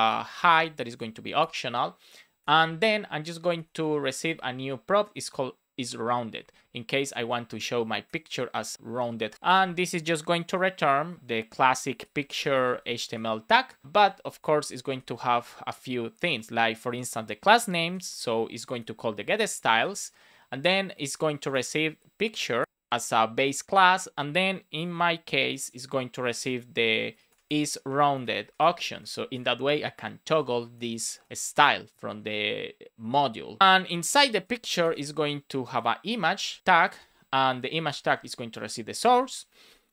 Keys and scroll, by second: 1.3 Return, 3.3 shift+r, 7.1 Down, 8.0 BackSpace, 9.1 Down, 9.4 shift+space, 10.4 shift+9, 11.0 Return, 11.4 shift+', 12.9 shift+', 13.8 Return, 13.9 Up, 14.2 super+Right, 14.4 Left, 14.7 space, 16.1 Return, 17.2 BackSpace, 17.7 shift+[, 19.1 shift+s, 20.0 shift+9, 21.2 shift+', 21.4 space, 22.5 BackSpace, 22.6 Right, 22.8 space, 24.7 shift+[, 25.3 Return, 26.0 Return, 26.7 BackSpace, 27.1 shift+', 27.2 space, 28.8 Right, 29.1 shift+;, 29.3 space, 30.7 shift+r, 31.3 super+s, 32.0 Down, 33.6 Down, 33.8 Tab, 34.2 shift+1, 36.3 Return, 36.8 space, 38.5 shift+[, 39.4 Right, 39.6 space.